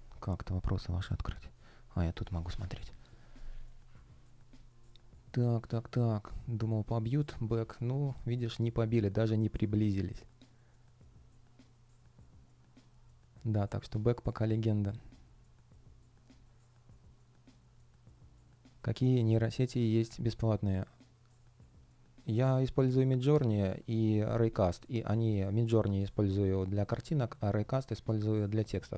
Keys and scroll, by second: 25.8 super+space.